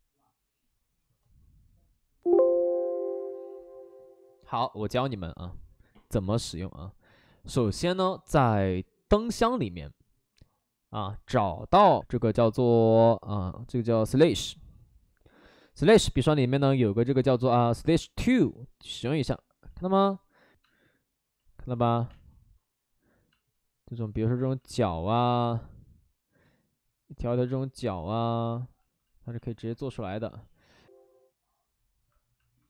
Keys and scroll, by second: 19.6 ctrl+z, 21.4 space, 21.8 ctrl+z, 22.0 space, 23.3 space, 24.2 ctrl+z, 24.4 ctrl+z, 24.6 space, 27.7 ctrl+z, 30.1 ctrl+z, 30.6 ctrl+z.